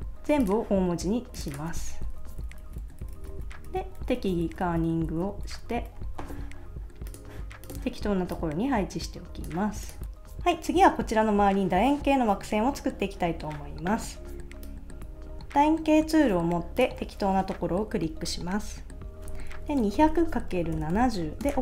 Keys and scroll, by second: 2.1 Left, 2.2 Right, 2.6 Right, 2.8 alt+Left, 3.0 Right, 3.7 alt+Right, 4.2 alt+Right, 4.7 alt+Right, 5.1 Left, 5.8 alt+Right, 19.6-21.4 typing, 21.4 Return.